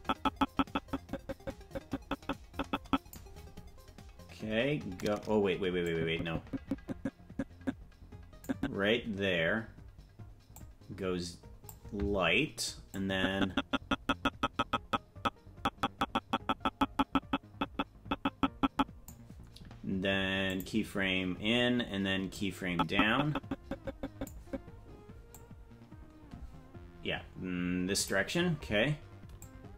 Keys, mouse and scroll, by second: 6.0-8.9 drag, 10.5-12.1 drag, 13.2-19.3 drag, 20.9 click, 22.8-24.6 drag, 25.7-28.5 drag.